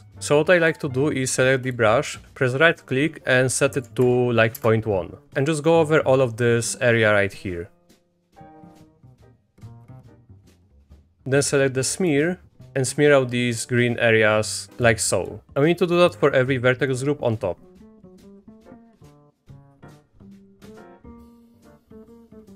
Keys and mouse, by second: 0.2 click, 0.3 Escape, 1.8-9.5 drag, 9.8 middle click, 11.9 middle click, 12.7-14.7 drag, 15.2 click, 15.5 Down, 15.5 Up, 15.5 Escape, 15.9 middle click, 16.9-20.3 drag, 20.8 click, 21.5 click, 21.6 click, 22.0 click, 22.1 click, 22.3 click.